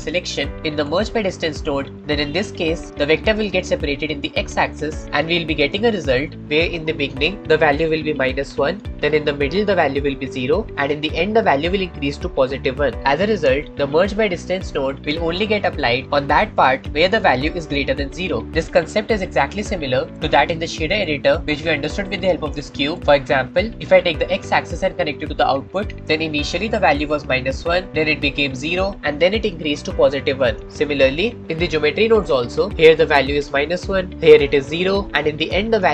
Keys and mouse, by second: 5.6-6.4 shift+middle drag, 19.2-20.0 shift+middle drag, 22.1-23.0 drag, 23.6 click, 24.6-26.0 drag, 32.0-35.6 drag.